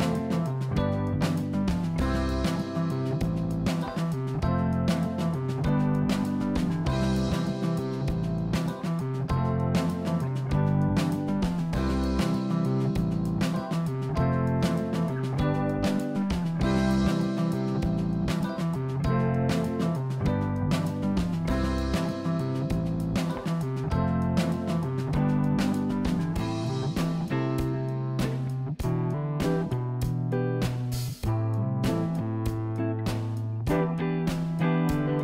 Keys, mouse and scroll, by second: 0.0 click, 1.8 click, 2.3 click, 5.7 click, 8.4 click, 8.8 click, 9.7-11.3 drag, 22.5 click, 23.0 click, 27.4 click, 29.4 click, 30.0 click, 31.7 scroll down 1, 32.0 click, 34.5 click, 34.9 shift+a.